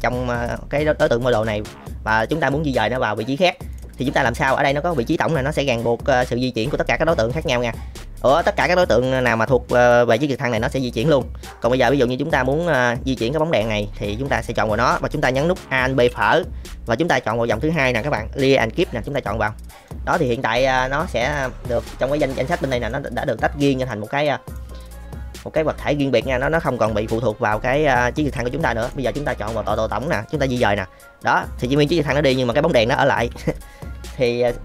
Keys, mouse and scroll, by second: 1.8 middle click, 4.8 click, 5.2 g, 7.3-7.6 middle drag, 11.4-12.4 drag, 16.0 alt+p, 19.8-20.2 middle drag, 21.5 click, 22.8 click, 26.8 g, 28.8 click, 30.5 g.